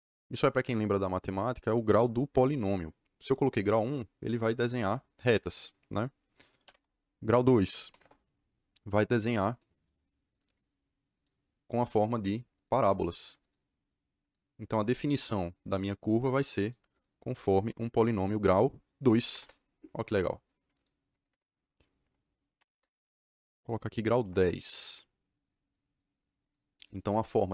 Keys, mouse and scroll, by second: 6.6 d, 7.8 KP_2, 7.9 KP_Enter, 10.2 click, 11.1 click, 12.5 click, 13.3 click, 14.1 click, 14.9 click, 15.7 click, 16.2 click, 16.6 click, 16.9 click, 19.2 c, 19.3 Return, 21.2 KP_Enter, 22.5 d, 22.7 KP_Enter, 24.1 KP_1, 24.2 KP_0, 24.3 KP_Enter, 25.6 click, 25.8 click, 26.1 click, 26.4 click, 26.7 click, 26.9 click, 27.2 click.